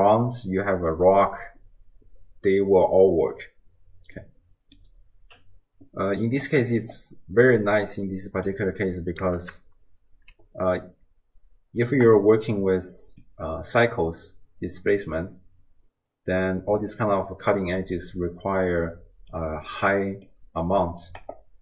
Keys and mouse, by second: 4.2-4.8 middle drag, 7.7-8.5 middle drag, 8.3 click, 8.3 right click, 10.3 d, 10.8-11.9 drag, 11.9 d, 12.0 d, 13.5 click, 13.5-14.7 middle drag, 13.5 right click, 15.0 click, 15.0 middle click, 15.0 right click, 19.0 d, 19.3 click, 20.3 d.